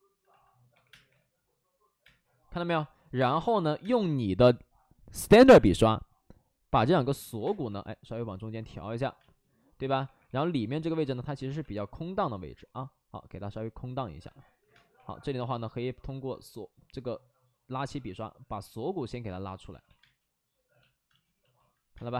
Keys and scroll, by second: 0.6 3, 0.8 space, 1.0 3, 2.0 space, 3.1 space, 3.4 1, 3.7 space, 6.6 space, 7.1 ctrl+z, 7.3 space, 7.6 3, 9.1 space, 9.9 1, 10.2 1, 11.4 2, 14.2 ctrl+z, 14.3 ctrl+z, 14.6 space, 14.9 1, 18.8 ctrl+z, 19.6 ctrl+z, 19.8 ctrl+z, 19.9 space, 21.0 space, 21.9 space.